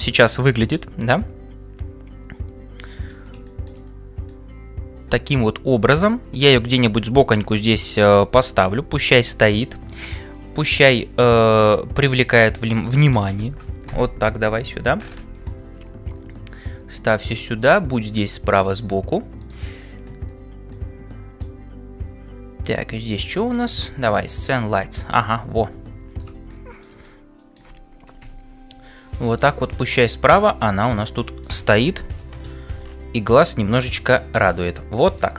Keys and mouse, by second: 14.4 shift+F5, 28.2 KP_5, 32.1 t, 33.4-35.3 drag.